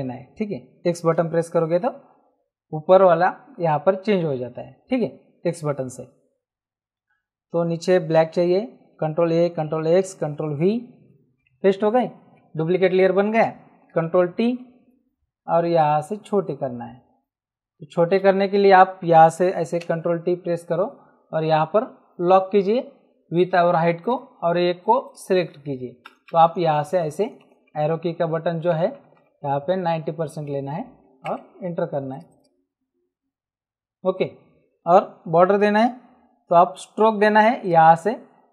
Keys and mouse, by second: 1.1 x, 8.1 x, 9.2 ctrl+a, 9.8 ctrl+x, 10.3 ctrl+v, 14.0 ctrl+t, 15.6 alt+shift+click, 18.5 Escape, 19.5 ctrl+t, 24.0 click, 26.0 Down, 28.7 Up, 29.8 Down, 31.2 Return, 31.2 KP_Enter, 32.1 click, 37.6 click.